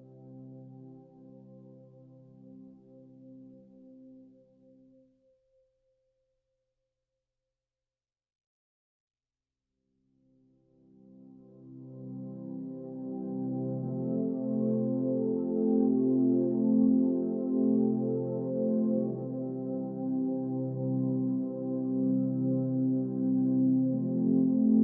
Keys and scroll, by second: 0.2 Left, 3.4 Down, 3.6 Left, 4.3 Right, 4.5 Up, 7.4 Down, 8.0 Left, 12.0 Down, 13.3 Down, 13.5 Up.